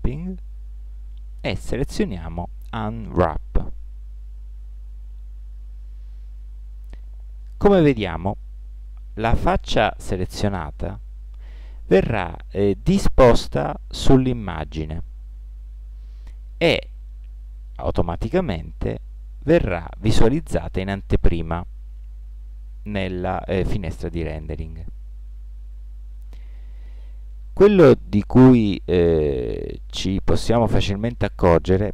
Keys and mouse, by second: 27.6-31.2 middle drag, 31.2-31.9 right drag.